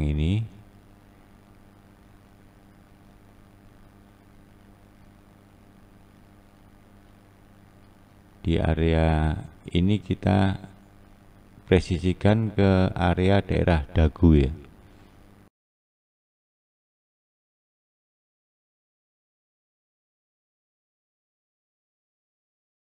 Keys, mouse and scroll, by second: 1.2 click, 1.9 click, 2.4 click, 3.8 click, 5.6-6.4 scroll up 2, 6.7 click, 7.4-8.5 right drag, 7.9-8.5 scroll down 1, 8.5 scroll down 1, 9.8 click, 10.6 click, 12.1 click, 12.6 click, 14.2 click, 14.6 click, 15.6 click, 15.7 click, 16.0 click, 16.1 click, 16.4 click, 16.4 click, 16.7 click, 16.9 click, 17.2 click, 17.3 click, 17.7 click, 17.8 click, 17.9 click, 18.0 click, 18.3 click, 18.4 click, 18.7 click, 18.7 click, 19.1 scroll up 1, 19.2 click, 19.4 click, 19.7 click, 19.8 click, 20.6 click, 20.8 click, 21.4 scroll down 1, 21.6 click, 21.7 click, 22.1 click, 22.2 click, 22.5 click, 22.6 click, 22.8 click.